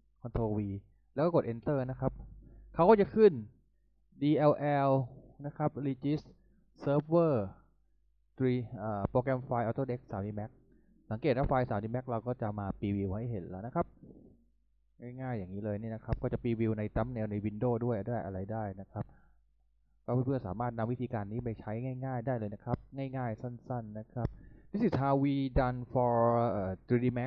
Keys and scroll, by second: 0.1 ctrl+v, 1.5 Return.